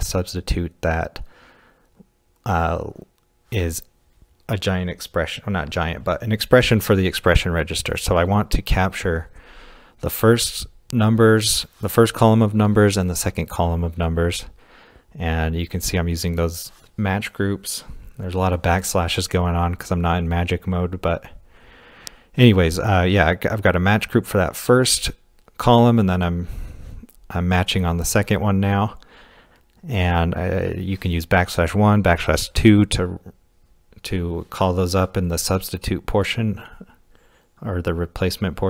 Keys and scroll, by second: 5.2 shift+6, 8.2-12.4 typing, 21.4-22.2 typing, 23.8 typing, 24.9-25.3 typing, 26.7-29.4 typing, 31.5-33.7 typing.